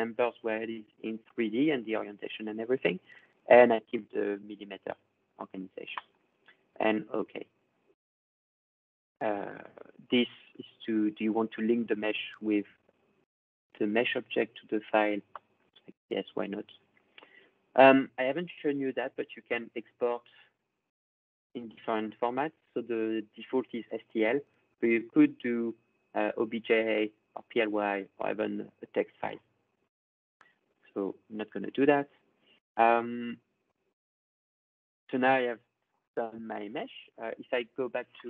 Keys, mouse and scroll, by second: 5.9-7.1 drag, 10.2 click, 13.0-15.7 drag, 18.6 click, 20.1 scroll, 20.2 click, 23.9 click, 28.4 click, 29.7-31.5 drag.